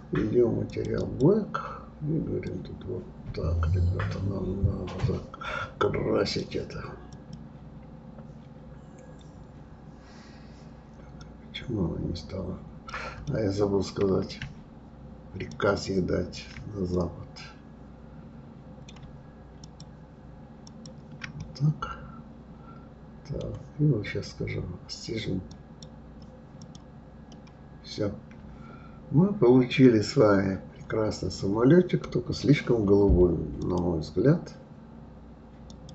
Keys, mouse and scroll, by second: 1.0 click, 7.1-8.2 drag, 11.2-13.3 drag, 13.3-15.5 middle drag, 15.5-16.9 shift+drag, 16.9-19.6 middle drag, 19.6 shift+click, 20.6 shift+click, 21.4-24.4 middle drag, 25.5 click, 26.6 click, 27.3-30.3 middle drag, 33.6 click, 35.7 click.